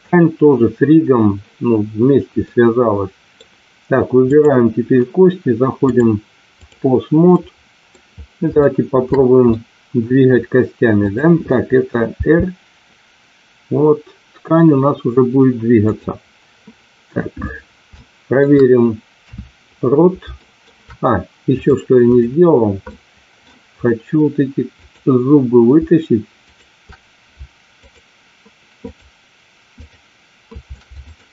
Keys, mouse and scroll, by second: 2.3-3.2 middle drag, 4.2 click, 5.9-6.9 drag, 7.3 middle click, 8.5 shift+middle click, 9.3 middle click, 10.9 click, 12.1 r, 18.0-18.4 shift+middle drag, 19.1 KP_3, 20.3 shift+middle click, 21.6 click, 23.0 middle click, 24.8 click, 27.9 shift+click, 28.7 shift+click, 29.9 shift+click, 31.0 shift+click.